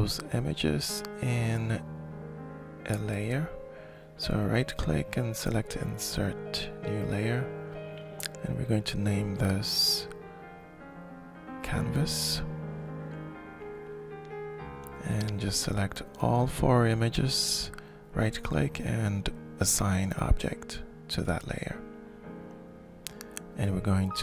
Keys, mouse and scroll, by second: 3.5-6.4 drag, 8.0 click, 8.2 click, 9.7-12.4 typing, 13.0 Return, 15.2 click, 16.4 shift+click, 17.9-19.2 drag, 21.0-23.0 drag.